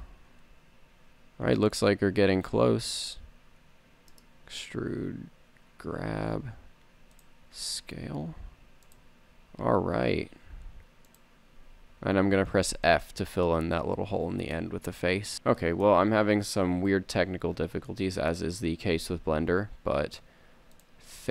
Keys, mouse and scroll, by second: 3.4 e, 5.5 g, 7.6 click, 7.9 s, 9.7 g, 13.1 f, 15.3 z, 15.9 KP_3, 17.0 KP_1, 19.5 g, 21.0 click, 21.2 a.